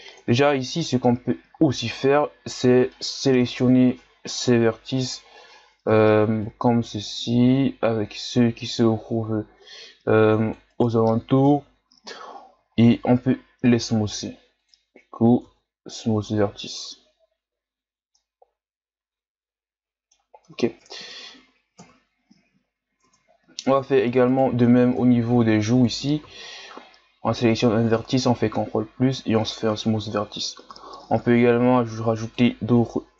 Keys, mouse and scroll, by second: 0.2 Tab, 2.9 middle click, 3.8-4.8 shift+scroll down 2, 5.9 c, 11.4 KP_1, 12.7-13.3 shift+scroll up 4, 13.3 w, 15.4 Tab, 16.6-17.9 shift+scroll up 1, 17.9 scroll down 2, 18.1-20.8 middle drag, 20.8 Tab, 21.8 KP_1, 22.6-23.0 scroll up 2, 23.0 Tab, 23.7 Tab, 24.3 right click, 25.0 ctrl+KP_Add, 26.2 w, 30.3 ctrl+KP_Add, 31.5 w.